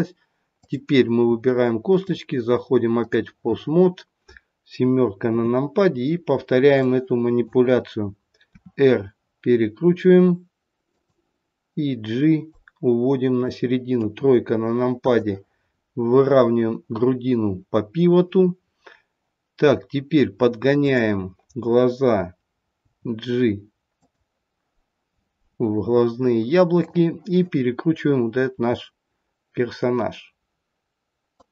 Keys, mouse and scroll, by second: 0.5 click, 2.0 click, 5.3 KP_7, 5.9-6.8 scroll down 4, 6.8 click, 6.8-8.2 scroll down 2, 8.4 r, 12.5 click, 14.0 KP_3, 15.0 click, 15.6-17.0 scroll up 1, 17.0-18.0 scroll up 2, 19.7-20.8 scroll up 2, 20.8 click, 22.8 g, 26.7 click, 28.4 r.